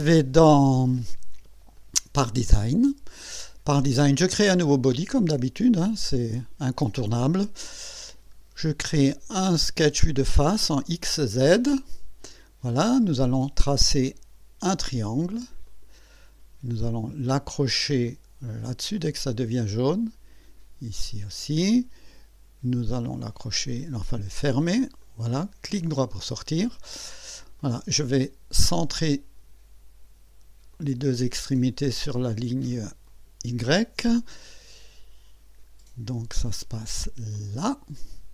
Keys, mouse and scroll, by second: 1.7 click, 2.3 click, 4.5 click, 6.8 click, 10.7 click, 11.8 click, 14.0 click, 15.7 click, 19.0 click, 21.2 click, 25.0 click, 25.8 right click, 26.6 scroll up 1, 26.9-27.3 scroll down 1, 27.6 right click, 29.1 click, 30.7 click, 33.1 click, 37.3 click.